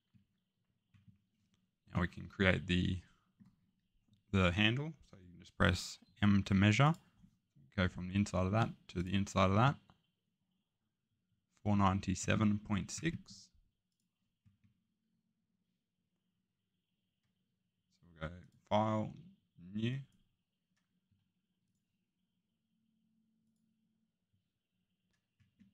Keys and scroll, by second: 6.0 m.